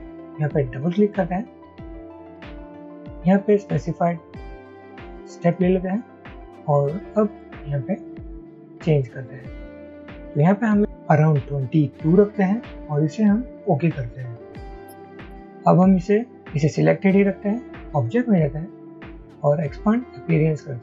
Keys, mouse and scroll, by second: 1.0 double click, 7.5-8.0 scroll up 1.